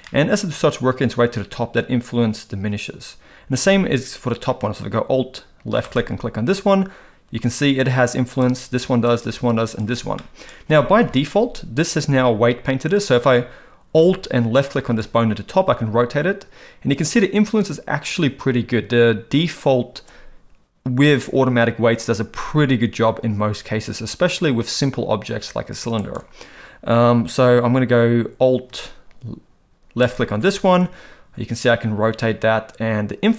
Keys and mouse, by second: 0.1 middle click, 5.9 alt+click, 8.3 alt+click, 9.1 alt+click, 9.7 alt+click, 10.2 middle click, 11.0 KP_1, 14.6 alt+click, 15.7 r, 30.8 r.